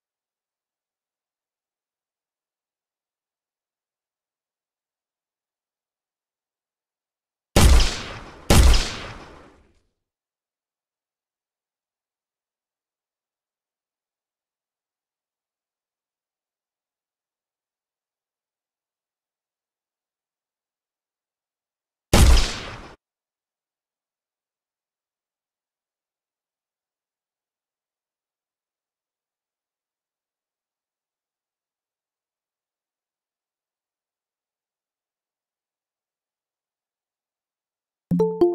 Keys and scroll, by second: 4.8 w, 8.2 w, 14.6 d, 15.2 w, 18.7 space, 19.2 w, 20.2 space, 20.5 w, 22.8 Escape.